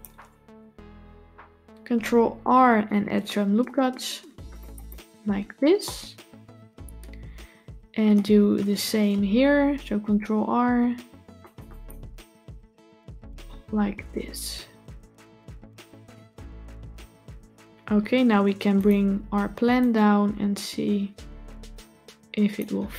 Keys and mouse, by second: 2.2 ctrl+r, 5.7-8.0 middle drag, 9.7 ctrl+r, 12.8 Tab, 13.2-15.9 middle drag, 18.6 click, 19.7-22.4 drag.